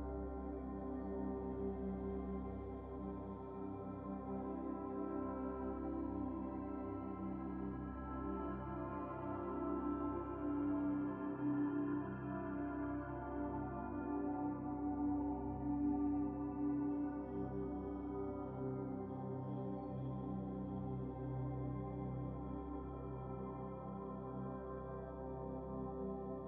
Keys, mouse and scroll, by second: 0.3 scroll up 2, 1.8-3.7 drag, 7.0 Tab, 7.1 scroll down 2, 7.4 middle click, 7.9 click, 9.0 shift+click, 10.3 ctrl+l, 12.7 scroll down 4, 14.0 ctrl+z, 15.1 click, 17.7 click, 18.0-18.3 scroll down 5, 18.3 middle click, 18.7-20.2 drag, 20.4 ctrl+c, 21.3 click, 21.9 Tab, 22.9 a, 24.1-25.2 drag, 25.5 shift+click, 26.1-26.4 drag.